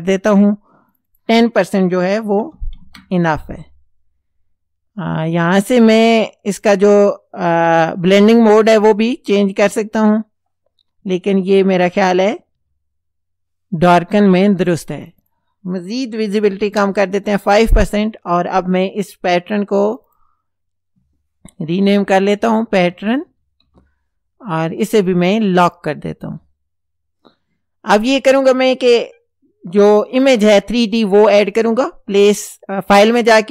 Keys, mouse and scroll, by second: 0.9 click, 2.2 KP_1, 2.4 KP_0, 2.8 KP_Enter, 6.7 click, 7.8 click, 8.2 click, 8.6 click, 9.6 click, 11.0 Down, 11.9 Down, 15.1 click, 16.3 KP_5, 16.6 KP_Enter, 19.9 click, 21.5-23.8 typing, 25.7 click, 30.3 click.